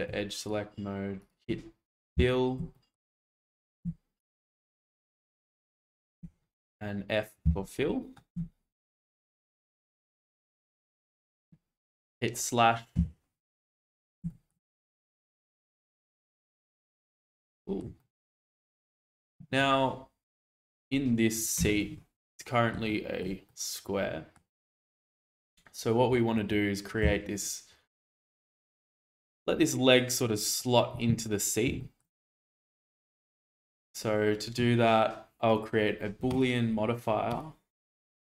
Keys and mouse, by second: 0.4 shift+click, 1.2 shift+click, 2.1 f, 2.7 shift+middle click, 4.2 shift+click, 5.1-6.2 shift+drag, 7.4 f, 7.8 middle click, 8.3 Tab, 9.2-10.7 middle drag, 14.3 shift+middle click, 14.6-15.6 middle drag, 16.7 shift+middle click, 17.6 shift+middle click, 18.0-18.8 middle drag, 22.3-22.7 middle drag, 22.9-23.2 shift+middle drag, 23.4-24.3 middle drag, 28.0 click, 28.9 shift+middle drag, 29.3-30.6 middle drag, 31.8 shift+middle drag, 36.3-38.3 drag.